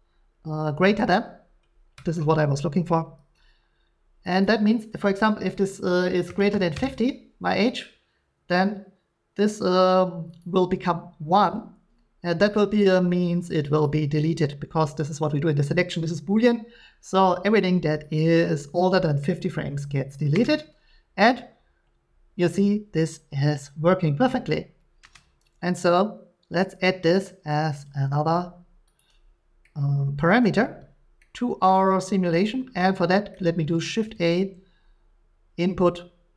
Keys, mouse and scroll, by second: 2.1 click, 4.4 click, 6.3-6.7 typing, 6.7 Return, 8.1 typing, 10.4 click, 11.4 click, 13.8 click, 18.1 click, 26.6 middle click, 29.0 click, 30.4 middle click, 31.7 middle click, 33.3 middle click, 33.6 scroll, 34.0 a.